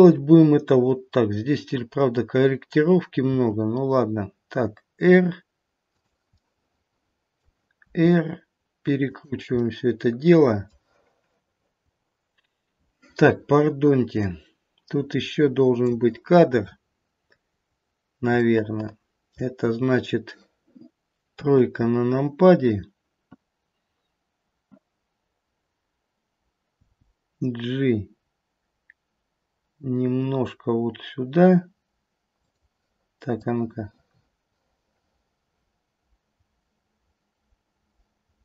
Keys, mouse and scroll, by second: 3.3 r, 6.3 middle click, 7.3 middle click, 7.7 r, 9.6 middle click, 10.4 middle click, 14.3 click, 17.8 scroll down 1, 17.9-18.3 scroll down 1, 18.4 shift+middle click, 19.3 shift+middle click, 21.4 KP_3, 26.7 g, 33.4 click.